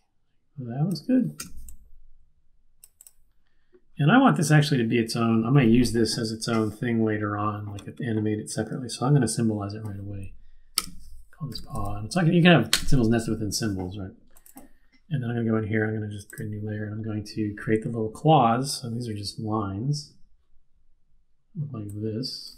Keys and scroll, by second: 1.4 v, 10.7 F8, 11.3-12.2 typing, 12.7 Return.